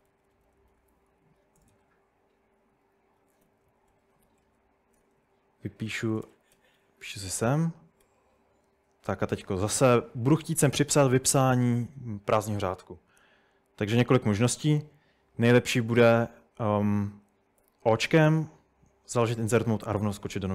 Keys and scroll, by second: 0.0-1.8 typing, 3.0-6.6 typing, 6.9 Escape, 8.0 j, 17.6 o.